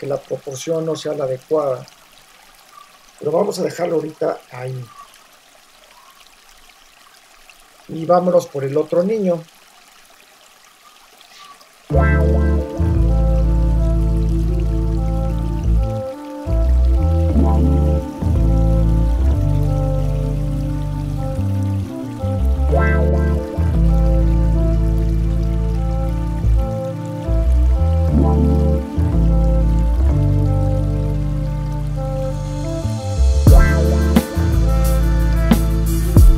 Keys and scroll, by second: 0.0 Return, 0.6 Left, 3.7 Right, 13.1 l, 14.8 super+s, 15.5 super+c, 15.7 super+v, 16.3 super+t, 18.2 super+t, 19.8 shift+Return, 22.1 l, 28.6 super+t, 30.3 Return, 30.7 v, 35.5 super+t, 36.0 Return.